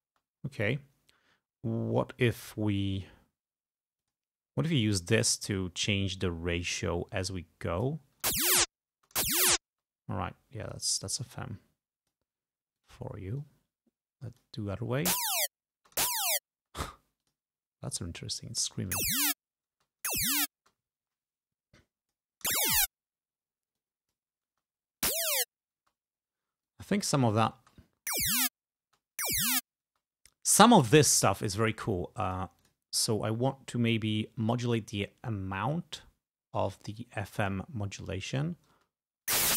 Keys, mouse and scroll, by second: 0.2 space, 4.1 click, 5.2 click, 6.7-8.2 drag, 8.4 space, 9.1 space, 10.8 click, 11.4 click, 12.8 click, 13.5-14.9 drag, 15.2 space, 15.9 space, 17.3 click, 17.9 click, 19.0 space, 19.9 space, 21.9 click, 22.6 space, 23.9 click, 24.6 space, 25.9 space, 26.8 click, 27.6 space, 28.9 space, 30.0 space, 32.4 click, 32.7 click, 35.7-37.8 drag, 38.3 click, 38.8 space.